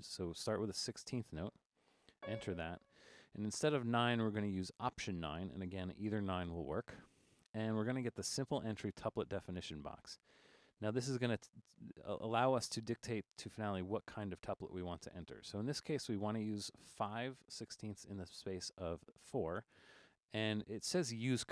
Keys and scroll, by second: 0.2 3, 2.2 c, 6.5 alt+9.